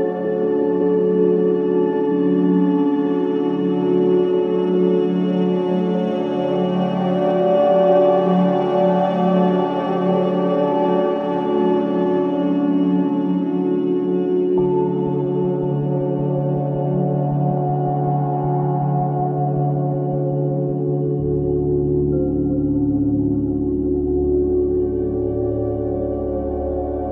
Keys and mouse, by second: 1.1 click, 3.1 click, 4.3 alt+click, 8.1 click, 10.4 click, 12.1 1, 12.8 6, 13.2 0, 13.5 Return, 14.4 click, 15.4-16.6 typing, 17.0 Return, 18.1-20.6 drag, 18.1 typing, 20.6 space, 22.5 click, 23.5 alt+click, 24.7 click, 24.7 typing.